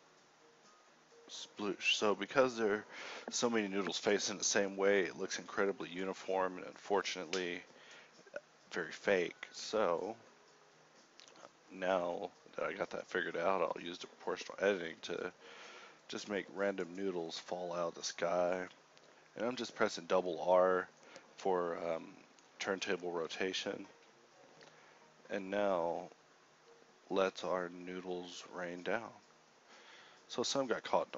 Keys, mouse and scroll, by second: 1.7 `, 2.1 Escape, 2.4 shift+Left, 2.6 KP_1, 2.9 a, 3.2 a, 5.9 a, 6.3 r, 7.9 h, 8.3 r, 10.6 r, 11.7 r, 14.1 r, 14.5 g, 16.3 r, 17.7 a, 18.1 KP_7, 19.1 alt+v, 19.8 KP_1, 21.1 alt+a, 21.1 Escape, 23.7 alt+a, 24.6 a, 30.9 a.